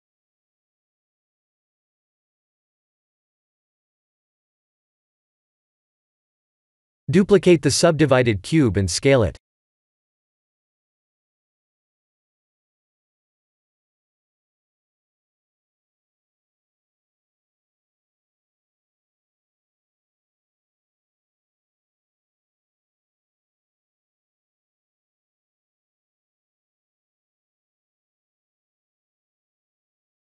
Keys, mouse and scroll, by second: 1.0 click, 2.5 click, 2.8 middle click, 5.2 KP_1, 6.2 click, 6.7 click, 8.1 shift+d, 10.4 s, 13.2 middle click, 15.0 click, 16.7 KP_7, 19.2 click, 25.1 middle click, 26.3 KP_1, 26.9-27.8 scroll down 3, 27.8 scroll down 1, 29.5 shift+d.